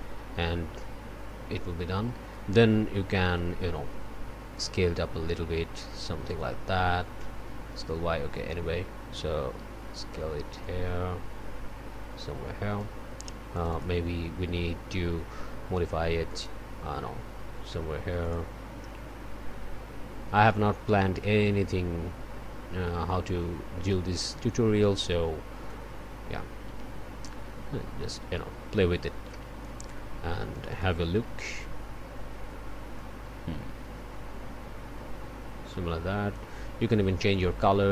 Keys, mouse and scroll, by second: 4.5-6.0 drag, 7.2-8.7 drag, 10.6-13.0 drag, 13.5 click, 16.3 click, 20.4-24.1 drag, 25.7-29.9 drag, 30.5 click, 33.0-36.6 drag, 37.3 click.